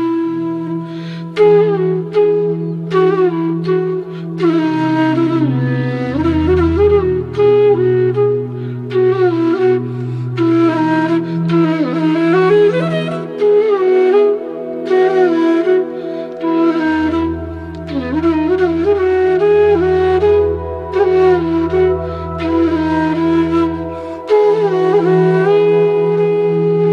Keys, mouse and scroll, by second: 4.2 click, 8.6 click, 9.3-13.2 shift+drag, 13.2-19.0 drag, 19.5 alt+scroll down 1, 21.9 alt+scroll up 1, 24.7-26.9 drag.